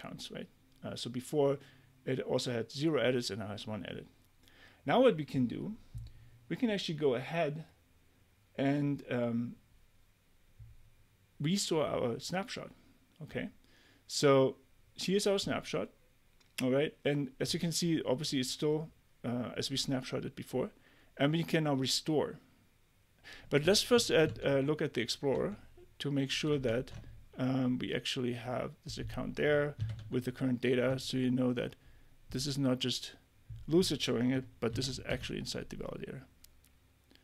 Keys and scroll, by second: 24.3 super+Tab, 26.6 Tab, 29.8 super+c, 30.0 super+Tab, 34.7 super+v, 35.1 Return.